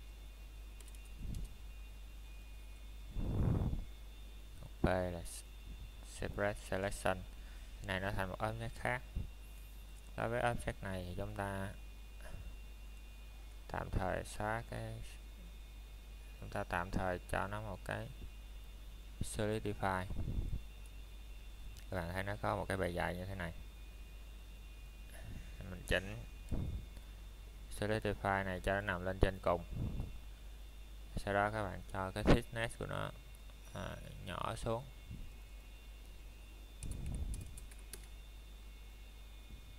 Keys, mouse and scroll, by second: 3.4 p, 5.3 click, 5.9 middle click, 6.8 scroll up 1, 7.7 middle click, 7.9 scroll down 1, 8.3 middle click, 12.3 middle click, 12.5 shift+middle click, 16.2 click, 19.4 click, 20.2 middle click, 20.8 shift+middle click, 23.6 scroll up 1, 23.8 middle click, 28.3 click, 33.5 click, 38.2 KP_Enter.